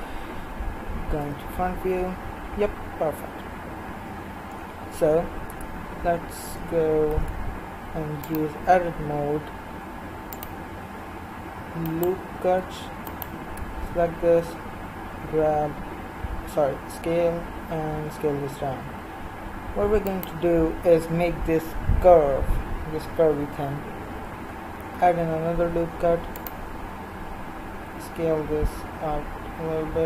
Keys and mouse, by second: 1.2 KP_1, 5.5 Tab, 7.0 ctrl+r, 11.9-14.4 right drag, 14.4 s, 24.8 ctrl+r.